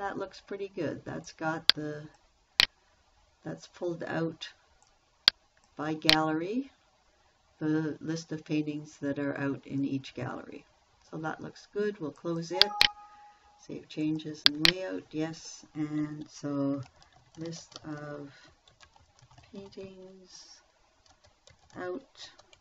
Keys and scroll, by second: 17.0-22.6 typing.